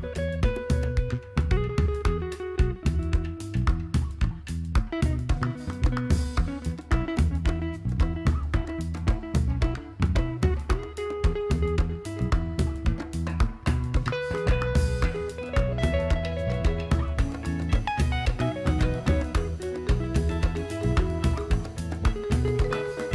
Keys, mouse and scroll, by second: 2.0 Delete, 2.6-4.5 drag, 4.5 alt+scroll down 1, 5.2 click, 6.1 click, 8.1 click, 17.1 click, 17.4 alt+scroll up 1, 18.9 click, 20.4-20.7 alt+scroll up 1.